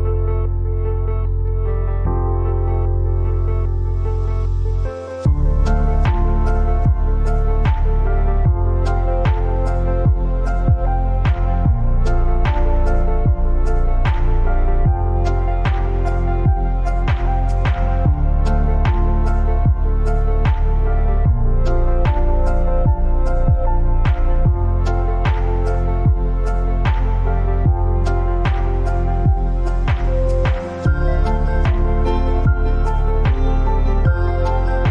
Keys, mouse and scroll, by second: 0.2-6.8 drag, 12.7 click, 15.4 alt+scroll up 1, 16.0 space, 16.2 click, 16.6 space, 17.3 ctrl+t, 18.6-24.3 shift+drag, 24.3 alt+scroll up 1, 25.5 shift+click, 26.3 alt+scroll up 1, 27.3 alt+scroll up 1, 28.0-30.6 shift+drag, 33.6 click.